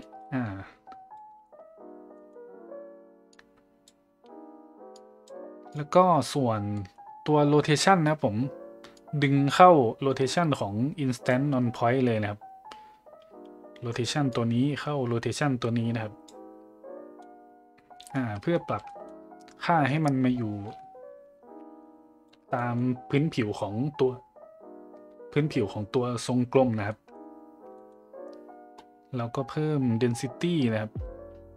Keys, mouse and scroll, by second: 0.0-1.2 shift+drag, 1.4 middle click, 2.2 middle click, 3.3 click, 5.0 click, 5.7 click, 5.9 click, 6.8 middle click, 9.0-11.3 drag, 14.3-16.2 drag, 17.2-18.1 middle drag, 18.3 middle drag, 18.8 middle click, 19.8 middle click, 20.7-22.3 shift+drag, 22.5 middle click, 26.9 middle drag, 27.8 middle click, 30.4-31.5 drag.